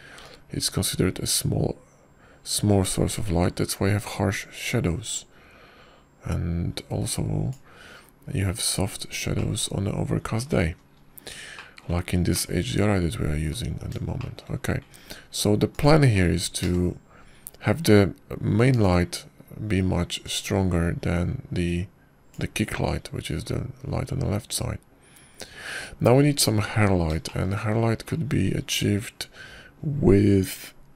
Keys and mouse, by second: 2.1-9.4 drag, 11.2-12.3 drag, 13.5 shift+click, 14.2 drag, 14.5-15.4 middle drag, 16.1 shift+click, 17.6 click, 18.5 ctrl+KP_0, 20.6 click, 22.1-24.2 drag, 30.0 click.